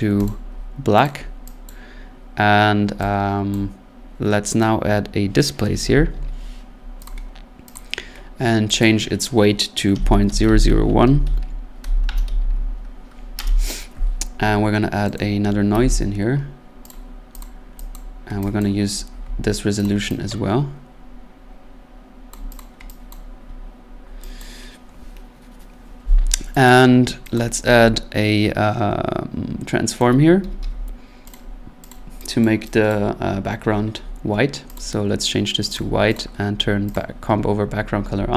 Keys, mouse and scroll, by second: 0.3 click, 1.0 click, 1.7 click, 3.5 click, 4.6 right click, 5.6-7.2 typing, 7.1 click, 7.7 click, 8.8 click, 9.7-13.4 typing, 15.2 right click, 15.7 n, 16.9 click, 17.4 click, 17.9 click, 18.2 middle click, 18.6 click, 19.8 click, 21.3 scroll down 1, 22.3 click, 22.3-22.6 scroll, 22.6 click, 23.1 click, 24.4 click, 26.7 click, 27.4 click, 30.0 right click, 30.2-31.1 typing, 31.3 click, 31.9 click, 32.4 click, 32.9 click, 33.2-33.7 scroll, 34.8 click, 35.8 click, 36.1 click, 36.9 click, 37.7-38.2 scroll.